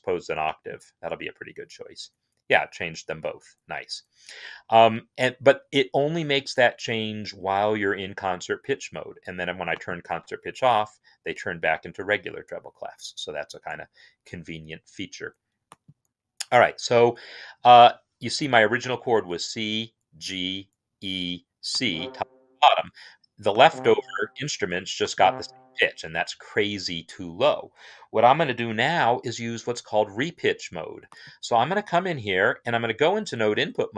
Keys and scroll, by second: 32.5 n.